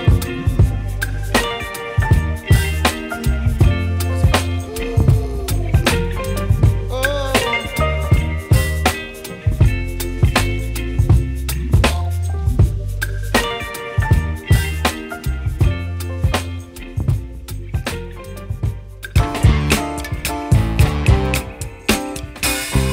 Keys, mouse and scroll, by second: 0.8 click, 1.4 click, 2.5-8.0 drag, 8.7-10.2 middle drag, 10.2 click, 11.0 Delete, 12.2 shift+a, 15.8-17.7 drag, 17.7 shift+a.